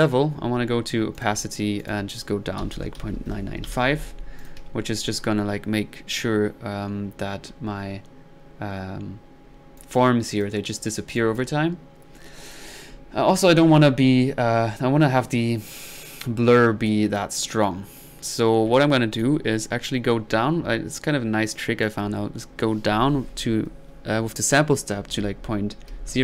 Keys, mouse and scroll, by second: 1.1-1.6 drag, 1.8-2.3 drag, 4.4 click, 4.6 1, 5.0-6.5 drag, 9.5 middle click, 9.8-10.8 drag, 11.2-11.6 drag, 12.5 click, 13.0-13.5 drag, 13.6-14.2 middle drag, 16.9 click, 21.5-22.0 drag.